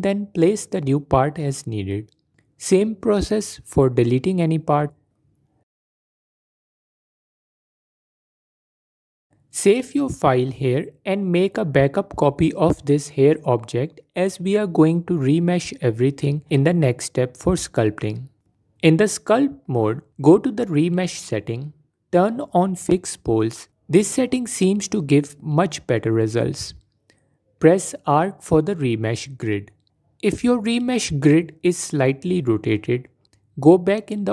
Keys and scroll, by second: 9.1 Tab, 17.4 Tab, 26.8 shift+r, 32.2 Escape, 32.8 Tab.